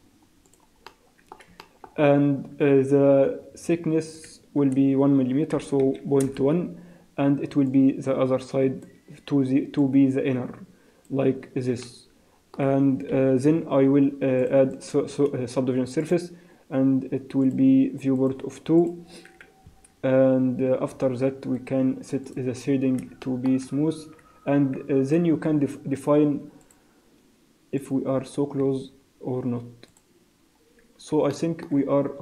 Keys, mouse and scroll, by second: 0.9 middle click, 1.7 shift+middle click, 2.0 scroll up 3, 4.2 click, 7.7 click, 9.8 click, 11.8 middle click, 12.6 scroll down 1, 13.1 KP_1, 14.4 click, 14.8 click, 17.5 click, 18.1 click, 18.8 click, 19.8 Tab, 21.0 Tab, 21.6 right click, 22.8 scroll down 2, 23.2 shift+middle click, 24.2 z, 25.5 z, 27.8 click, 28.6 z, 29.4 z, 29.9 click, 30.5 scroll up 2, 31.3 shift+middle click, 31.8 scroll up 2.